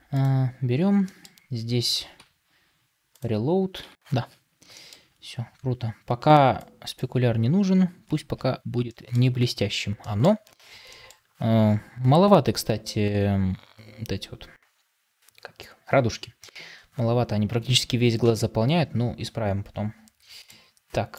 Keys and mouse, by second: 8.7-20.3 shift+middle drag.